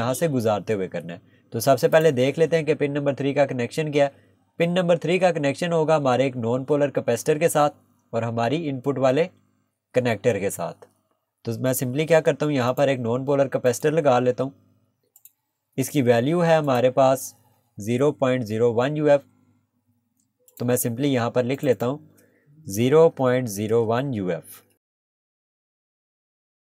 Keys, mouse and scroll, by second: 2.0 click, 12.7 click, 15.7 Escape, 16.7 click, 20.5 click, 23.1 ., 25.1 click, 26.0 click, 26.2 space, 26.4 click.